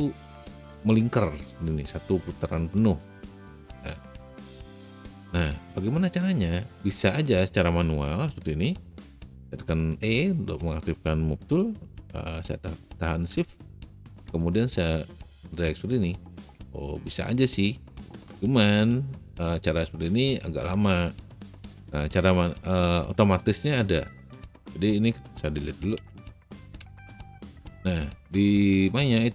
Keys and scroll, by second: 10.1 e, 26.0 Delete.